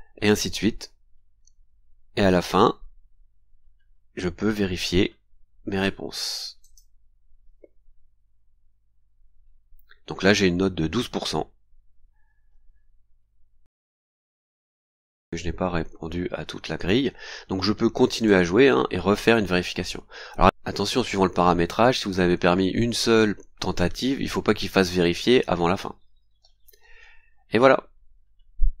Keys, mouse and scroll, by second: 0.3-0.6 scroll down 1, 0.8-1.2 scroll down 1, 1.6 scroll down 2, 2.5-4.3 scroll down 8, 4.4-5.8 scroll up 8, 6.6 click, 8.6-8.9 scroll down 2, 9.3 scroll down 2, 9.8-10.1 scroll up 2, 14.4-15.5 scroll down 6, 17.1 scroll up 2, 18.1 click, 19.1-19.4 scroll up 2.